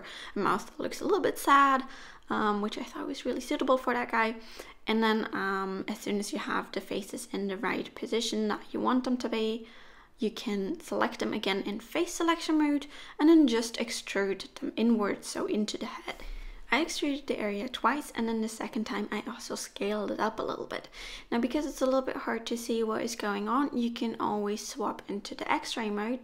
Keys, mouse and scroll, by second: 0.4 middle click, 1.0 1, 1.4 click, 2.0 shift+click, 2.6 s, 4.5 s, 5.5 middle click, 6.9 middle click, 7.9 3, 8.2 click, 8.5 shift+click, 8.9 middle click, 11.2 e, 15.2 e, 16.3 s, 18.4 middle click, 20.3 click, 20.9 middle click, 22.7 middle click, 26.0 middle click.